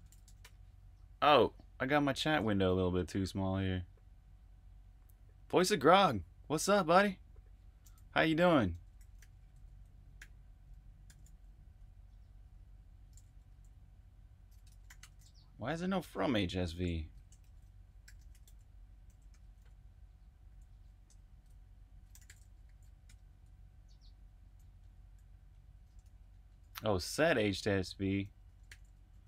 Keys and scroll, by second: 0.1 typing, 8.7 Escape, 9.1-10.4 typing, 12.7-13.4 typing, 14.5-15.3 typing, 17.4 shift+super+f, 18.0-19.2 typing, 20.4-23.1 typing, 25.7-26.7 typing, 28.2-29.2 typing.